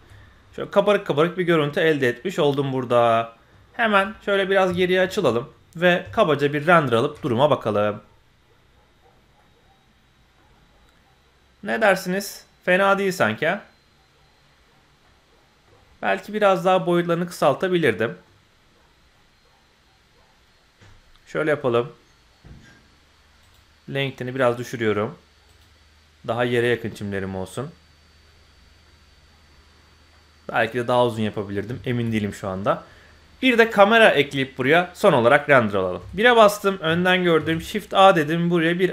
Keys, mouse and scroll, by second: 0.1-0.9 scroll up 5, 0.9-2.4 middle drag, 2.4-3.5 drag, 3.5-4.6 scroll down 4, 4.1 middle click, 4.7 shift+middle click, 5.0 scroll down 1, 5.2 middle click, 5.8 scroll up 1, 6.0 z, 9.3 middle click, 9.4 click, 9.5-10.4 middle drag, 11.8-12.9 middle drag, 15.0 middle click, 15.8 scroll up 1, 17.7 scroll down 2, 18.0 middle click, 20.0 scroll down 1, 23.4 click, 24.3 click, 25.4 click, 26.6 middle click, 26.6 scroll up 1, 28.2-28.9 middle drag, 30.1-31.2 middle drag, 31.6 z, 32.3 middle click, 32.6 scroll down 1, 32.8 middle click, 36.0 KP_1, 37.3 shift+a.